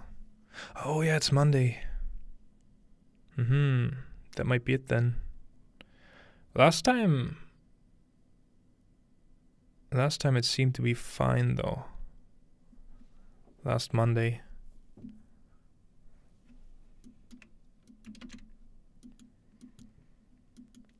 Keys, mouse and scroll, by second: 17.4-18.3 scroll up 1, 18.3-19.3 scroll up 1, 19.3 ctrl+middle click, 19.3-20.3 scroll down 2.